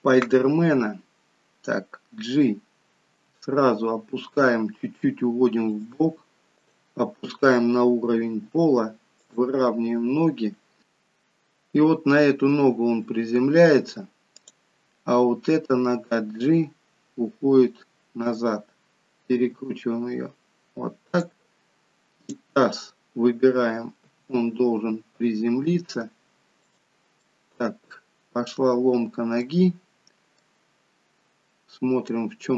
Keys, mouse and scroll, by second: 3.0 g, 6.7 click, 8.3 r, 14.4 click, 15.8 g, 19.4 r, 22.1 click, 24.0 g, 27.3 middle click, 30.4 middle click.